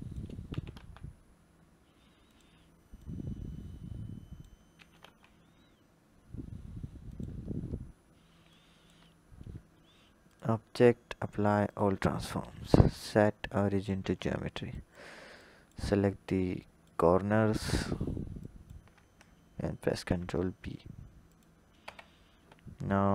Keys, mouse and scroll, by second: 0.3 s, 2.8 click, 4.6 s, 7.3-8.3 scroll down 2, 8.3 click, 8.9-10.1 scroll up 1, 10.1-13.9 drag, 13.9 Tab, 14.6 click, 15.2 click, 16.4 shift+click, 17.2 shift+click, 18.2 shift+click, 19.7 ctrl+b, 21.6 Tab.